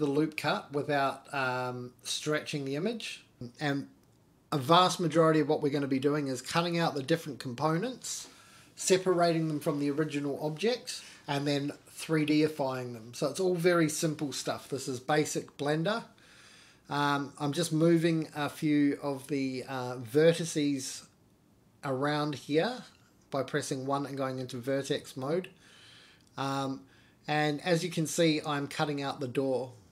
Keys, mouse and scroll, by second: 0.3 middle click, 1.2 middle click, 1.8 middle click, 3.8 g, 11.0 ctrl+r, 11.9 click, 12.9 g, 15.0 click, 15.3 g, 17.5 click, 17.5 middle click, 18.7 middle click, 19.4 scroll down 1, 19.6 middle click, 20.7 shift+middle click, 23.0 ctrl+z, 23.4 ctrl+z, 24.1 ctrl+z, 25.6 ctrl+r, 28.9 ctrl+r.